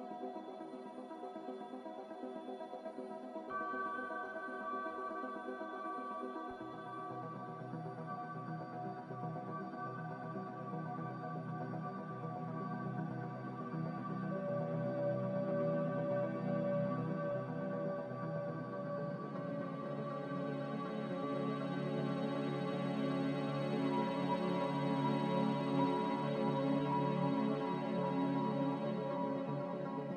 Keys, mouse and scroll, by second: 0.2 Escape, 0.3 Escape, 1.3 Escape, 1.3 x, 6.4 z, 8.7 a, 9.4 z, 14.1 click, 15.1 click, 15.9 a, 17.8 3, 18.1 Return, 19.0 click.